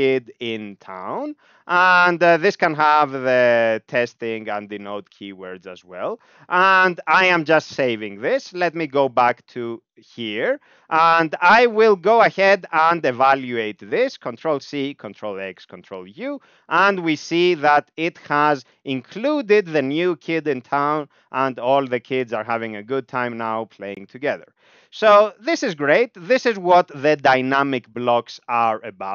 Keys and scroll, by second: 0.1-1.1 typing, 1.3 Return, 2.7-4.5 typing, 6.5 ctrl+s, 8.6 ctrl+p, 9.7 Up, 9.9 Up, 10.0 Up, 10.2 Up, 10.4 Down, 10.6 Down, 10.7 Down, 10.9 Down, 11.4 Up, 11.4 Up, 11.6 Up, 11.8 Up, 11.9 Up, 12.1 Up, 12.2 Up, 12.3 Up, 15.5 ctrl+u, 16.7 Down, 16.8 Down, 16.9 Down, 17.0 Down, 17.2 Down, 17.3 Down, 17.5 Down, 19.9 Up, 20.2 Up, 20.4 Up, 20.5 Up, 20.7 Up, 20.8 Up, 21.0 Up, 21.4 Down, 21.5-22.3 Down, 25.2 ctrl+s.